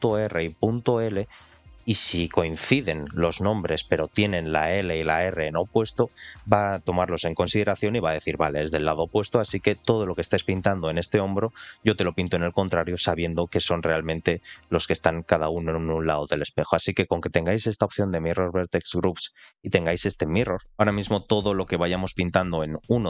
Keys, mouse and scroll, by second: 20.7 w, 22.7 click.